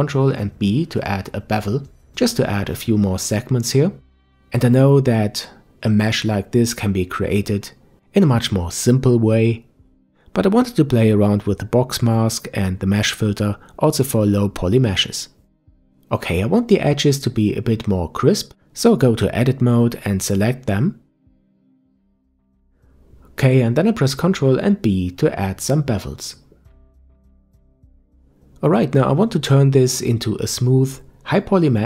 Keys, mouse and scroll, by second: 4.5 Tab, 5.0-5.6 scroll down 2, 5.6-8.6 middle drag, 9.1 ctrl+s, 16.1 scroll up 1, 16.3 Tab, 17.8 click, 18.6 click, 20.0 shift+click, 20.8 middle click, 21.8 shift+click, 22.2 shift+click, 22.3 shift+click, 23.0 ctrl+b, 26.9 Tab, 27.2 scroll down 1, 27.5-28.0 middle drag, 28.0-30.9 scroll up 1.